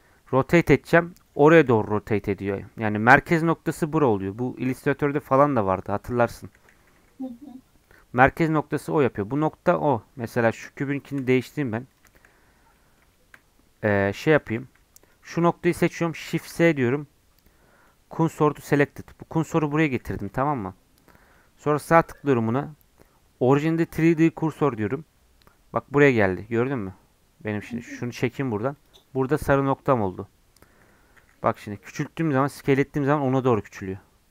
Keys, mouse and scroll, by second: 0.4 r, 1.5 r, 6.7 r, 9.4 scroll up 3, 9.9-10.3 scroll down 5, 10.6 shift+click, 11.1 shift+middle click, 11.4 click, 11.6 scroll up 4, 11.9 click, 12.2 shift+middle click, 12.3-12.8 scroll up 6, 12.8 middle click, 13.6-14.0 scroll down 2, 14.3 Tab, 14.5 1, 15.0-16.3 drag, 16.3 shift+s, 20.2 Tab, 20.5 click, 21.2-28.8 right drag, 28.8 click, 29.7 scroll up 1, 30.4 scroll down 2, 31.2 s.